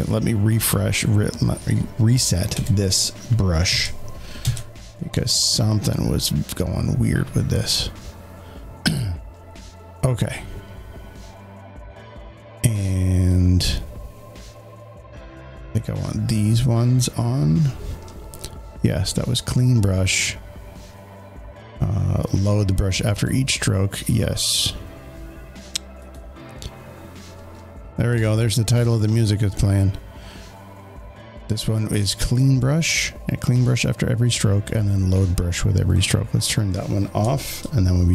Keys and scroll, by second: 2.1 Escape, 3.6 ctrl+z, 7.7 z.